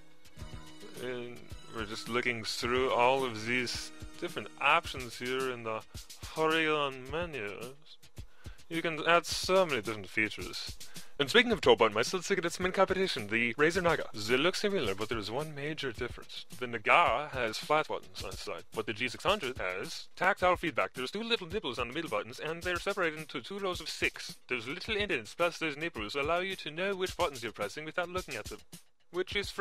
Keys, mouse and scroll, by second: 0.0-0.1 typing, 2.4-4.8 typing, 5.0 click.